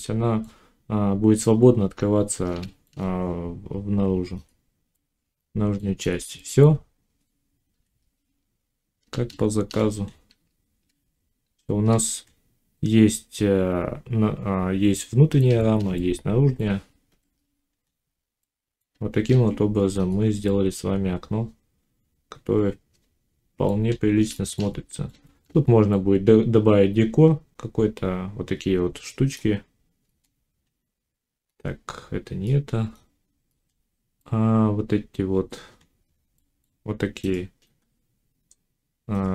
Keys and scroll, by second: 7.6 1, 17.0 5, 19.1 ctrl+s.